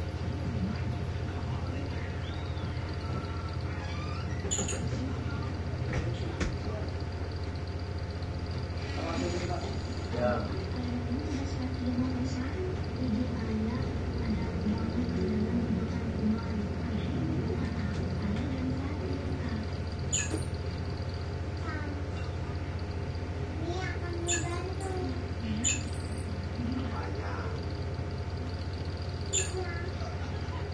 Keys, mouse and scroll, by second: 1.0 click, 2.8 click, 4.2-5.5 drag, 5.9 5, 6.4 Return, 8.0 click, 9.1 click, 10.8 click, 14.3-15.6 drag, 16.1-17.8 drag, 18.5 shift+Right, 21.3 click, 23.5-25.2 drag, 26.6 click, 27.9-29.1 drag.